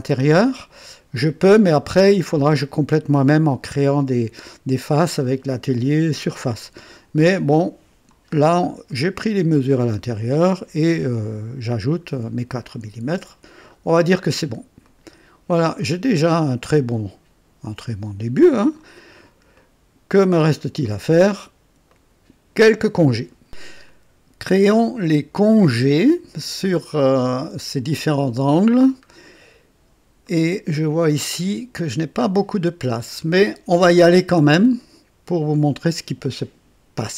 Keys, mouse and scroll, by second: 8.3-8.6 scroll down 2, 8.8-9.8 right drag, 11.1 click, 13.4 scroll down 2, 14.7 click, 15.7-18.9 drag, 19.0 scroll up 2, 19.5-20.3 right drag, 20.8 click, 21.8 right click, 23.8-26.4 drag, 28.7 scroll up 2, 29.2-29.8 right drag, 30.2 click, 31.0-31.7 drag, 33.0 scroll down 2, 34.0-35.0 drag, 35.5 right click.